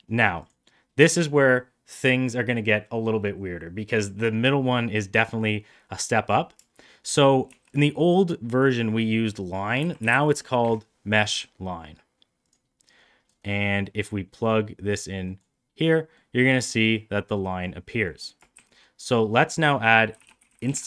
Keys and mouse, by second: 0.3 click, 5.0 middle click, 13.7 middle click, 14.3-15.3 drag, 16.0-16.6 middle drag, 17.2 middle drag, 17.9 middle click, 18.4 shift+a.